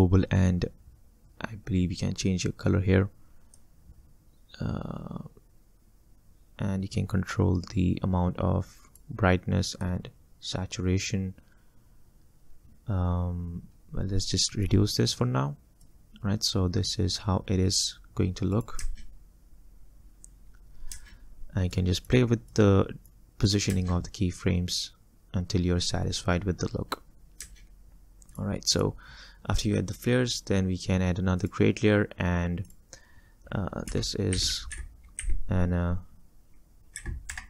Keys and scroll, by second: 16.1 space, 18.9 space, 23.8 space, 27.5 space, 28.3 space, 34.0 F2, 34.4-35.2 typing, 36.8-37.4 typing.